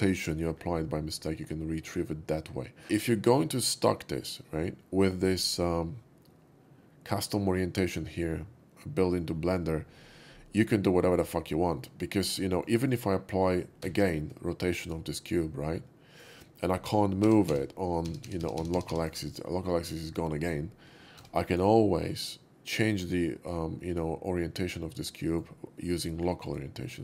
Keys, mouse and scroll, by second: 0.4-2.8 middle drag, 5.3 click, 11.0-11.4 middle drag, 11.8 middle click, 12.5 middle drag, 12.9 click, 14.2 ctrl+a, 14.7 click, 15.3-16.3 middle drag, 16.9 middle click, 17.6 g, 17.6 z, 18.3 z, 18.5 z, 19.1-19.6 right drag, 19.6-19.9 middle drag, 20.1 middle click, 21.2 Tab, 21.5 click, 21.9-25.3 middle drag, 26.4 click.